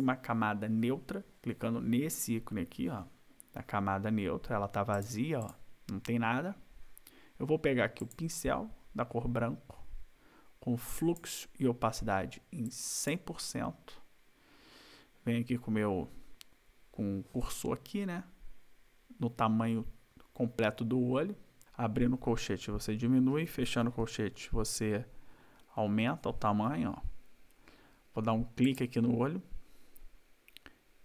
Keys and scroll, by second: 21.6 ], 22.1 ].